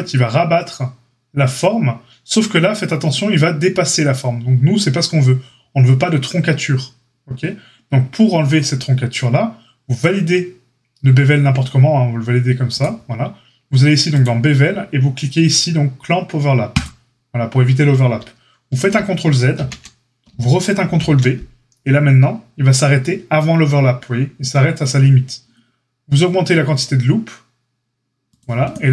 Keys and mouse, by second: 0.6-3.6 right drag, 3.6-5.4 middle drag, 5.4-28.9 right drag, 14.3-16.7 drag, 19.5 ctrl+z, 20.8 ctrl+b.